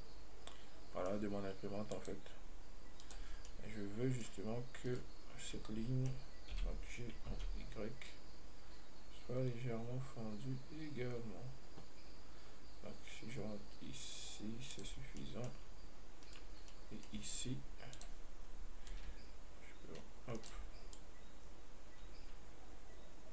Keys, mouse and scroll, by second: 2.2 click, 3.3 click, 3.7 scroll down 1, 3.7-5.1 middle drag, 5.1 right click, 5.5-5.8 scroll up 2, 5.8-6.8 middle drag, 6.8 g, 16.5 right click, 17.0-18.2 middle drag, 18.2 click, 19.2-20.7 drag, 21.2-23.3 drag.